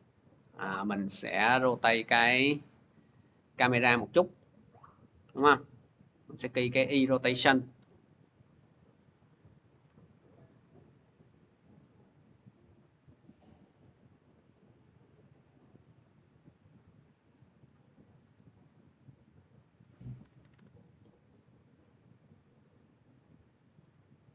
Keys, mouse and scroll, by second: 1.9 click, 4.1 ctrl+z, 6.4 click, 7.3 click, 7.6 u, 9.2 click, 13.5 click, 19.2 click, 19.8-20.7 typing, 22.3 typing, 22.9 click.